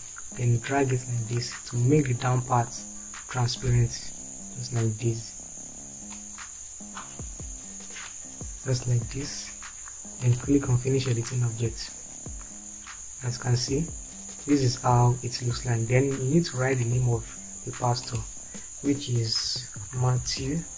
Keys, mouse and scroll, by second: 19.6 typing.